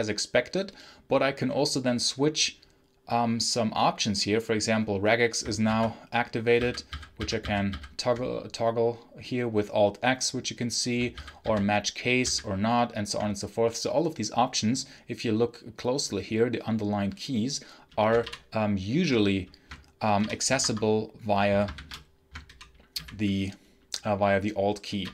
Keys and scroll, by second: 5.5 alt+x, 6.4 alt+x, 6.8 alt+x, 7.0 alt+x, 7.3 alt+x, 7.6 alt+x, 11.0 alt+x, 11.3 alt+c, 12.1 alt+c, 18.1 alt+p, 20.1 alt+p, 20.5 Escape, 21.6 ctrl+shift+f, 22.3 alt+p, 22.8 alt+m, 24.9 alt+p.